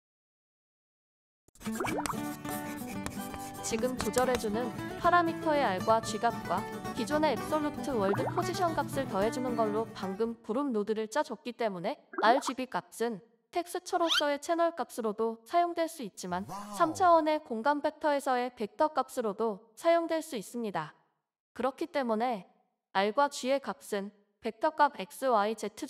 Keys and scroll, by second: 15.3-16.1 typing, 18.4-19.4 typing, 21.1-24.1 typing.